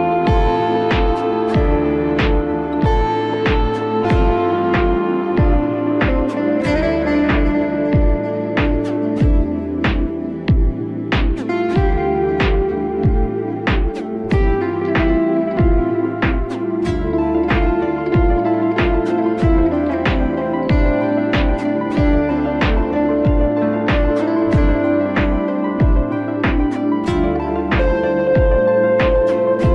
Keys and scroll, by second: 7.4 ctrl+z.